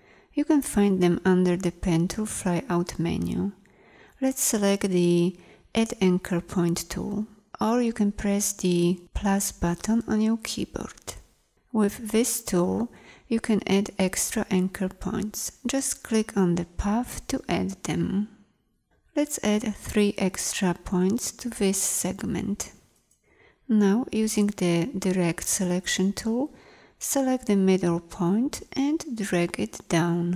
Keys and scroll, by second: 8.1 =, 24.2 a.